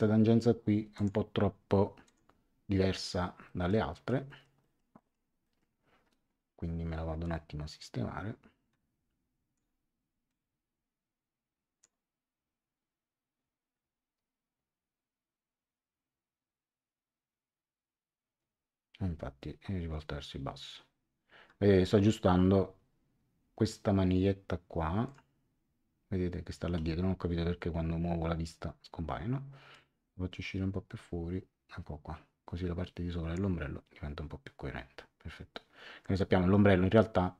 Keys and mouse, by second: 0.9 click, 2.0 click, 3.4 middle click, 7.2 click, 10.2 click, 25.0 click, 29.7 click.